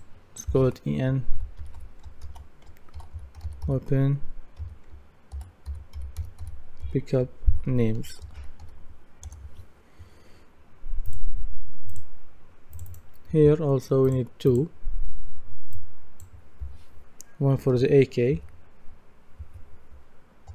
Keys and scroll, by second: 1.3 shift+e, 1.6 shift+n, 2.7-9.1 typing, 9.3 Return, 17.7 shift+a, 18.3 shift+k.